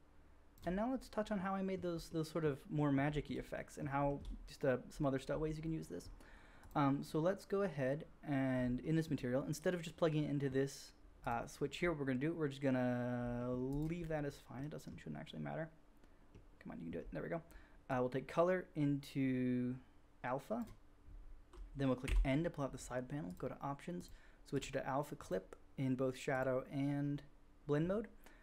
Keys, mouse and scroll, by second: 6.6-23.9 drag, 11.2 middle click, 11.2 right click, 17.8-23.3 middle drag, 17.8-23.3 right drag, 22.0 n, 23.9-28.4 middle drag.